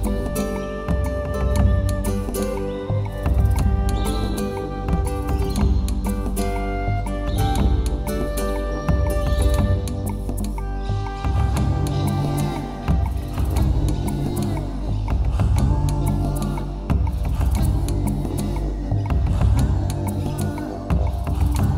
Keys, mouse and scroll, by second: 1.2-2.1 ctrl+z, 2.5 ctrl+z, 2.8 ctrl+z, 3.0 ctrl+z, 3.5 scroll down 3, 3.7 middle click, 4.8 a, 5.3 KP_1, 5.7 scroll down 5, 6.2 shift+middle click, 7.8 ctrl+r, 14.0 right click, 14.2 middle click, 14.8 shift+middle click, 15.1 middle click, 15.5 shift+middle click, 17.0 ctrl+z, 17.8 ctrl+r.